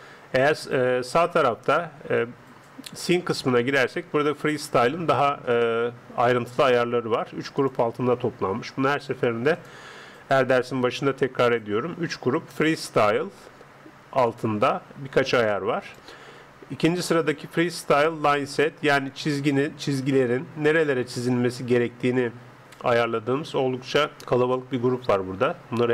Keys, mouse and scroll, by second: 3.1 click, 4.8-9.5 middle drag, 9.5 right click, 14.3-17.8 drag, 19.8 click.